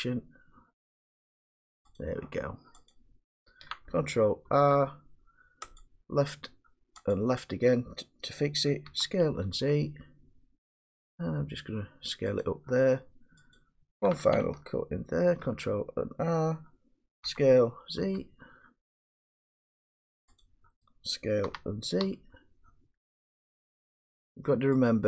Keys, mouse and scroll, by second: 2.0 click, 2.9 click, 4.5 ctrl+r, 5.8 click, 7.2 click, 8.9 s, 9.7 z, 12.4 click, 13.6 click, 15.2 ctrl+r, 17.3 s, 18.0 z, 20.4 click, 21.5 s, 22.1 z, 24.9 click.